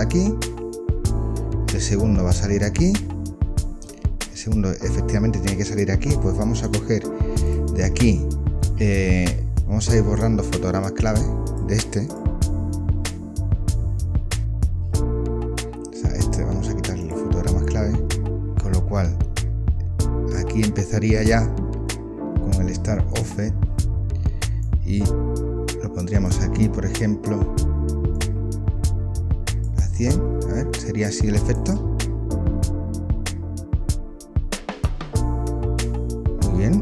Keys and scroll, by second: 3.7 space, 31.6 space.